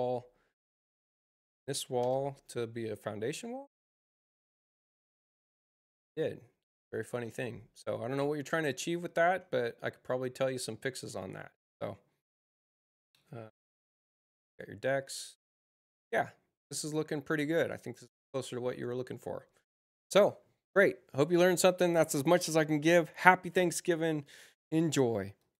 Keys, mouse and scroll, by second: 5.0 click, 5.9 click, 6.4 Return, 9.1 space, 25.3 click.